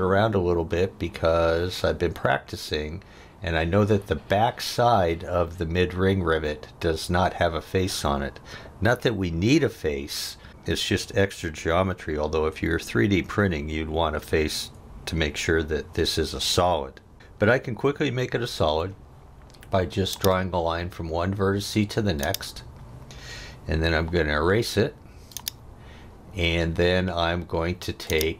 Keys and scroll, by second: 18.7 l, 23.7 e.